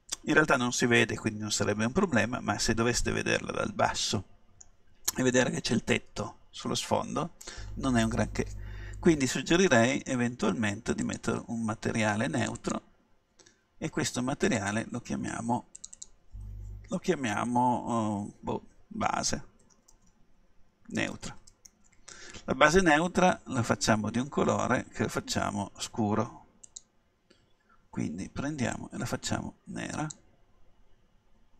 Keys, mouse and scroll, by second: 2.1-3.9 middle drag, 11.1-17.9 drag, 26.7-28.6 drag.